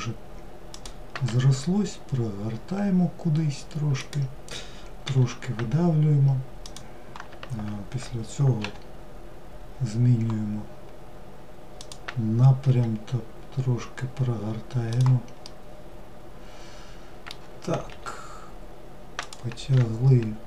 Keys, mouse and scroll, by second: 15.0-17.5 middle drag, 17.5 e.